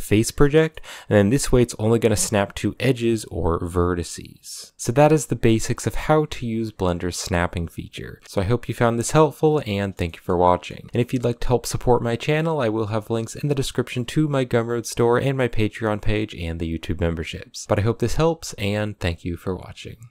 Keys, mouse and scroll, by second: 0.6 middle click, 0.8 g, 9.6-10.1 shift+middle drag, 10.1 scroll up 1, 10.2-10.6 middle drag, 10.6 scroll down 1, 10.9-11.8 middle drag, 11.8 g, 17.6 shift+d, 18.1 shift+d, 19.0 shift+d.